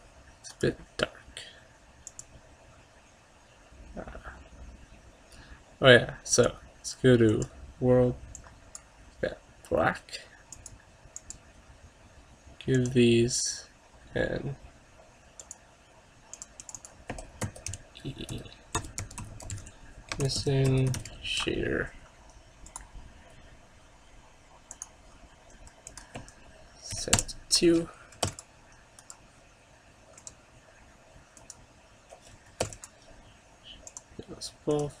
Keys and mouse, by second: 0.6-2.5 right drag, 2.2-3.9 drag, 6.4-9.2 drag, 10.6-14.7 drag, 15.5-18.8 drag, 19.4 s, 22.9-24.5 drag, 24.6 click, 26.0-27.9 drag, 28.3 ctrl+s, 29.1-30.3 drag, 30.9 click, 32.7 ctrl+s, 34.0-35.0 drag.